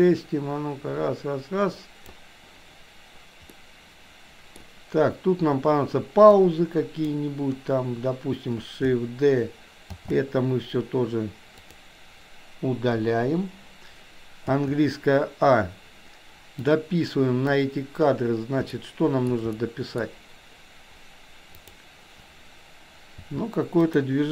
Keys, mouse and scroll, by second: 3.6-4.6 middle drag, 6.3-7.0 drag, 10.0 shift+d, 13.0 Delete, 14.5 a, 16.6 click, 18.7 shift+middle click, 19.5 middle click, 21.6 click, 23.2 r.